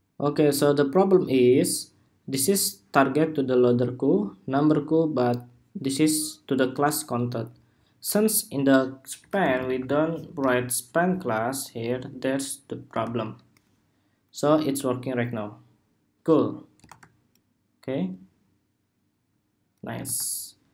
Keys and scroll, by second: 11.5 super+s, 12.8 super+r, 16.5 super+r, 19.7 super+r.